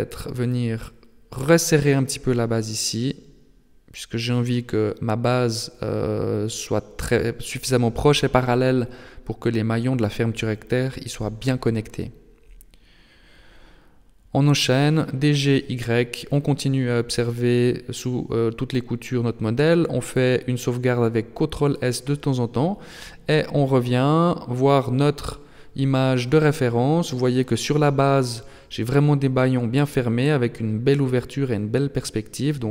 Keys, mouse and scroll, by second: 13.2 middle click, 14.2 shift+middle click, 14.9-16.2 scroll down 1, 16.2 Tab, 17.9 ctrl+s.